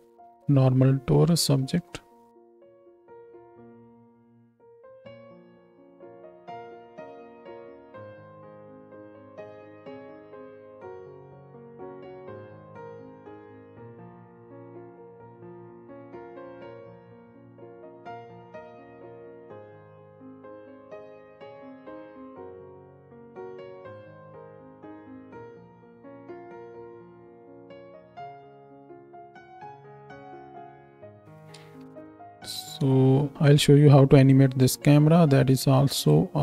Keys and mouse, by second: 2.7 z, 3.1 ctrl+space, 3.1 ctrl+middle click, 3.4-13.1 drag, 6.3 BackSpace, 8.1 z, 11.1 ctrl+space, 12.8 z, 13.5 click, 13.6-17.1 ctrl+middle drag, 13.9 ctrl+space, 14.5 r, 15.9 g, 16.4 ctrl+space, 16.4 ctrl+shift+click, 17.1-25.6 drag, 22.5 ctrl+space, 24.8 space, 25.6 middle click, 25.9-28.8 drag, 28.8 ctrl+space, 29.1 click, 31.2 space, 31.9 ctrl+space, 36.1 middle click.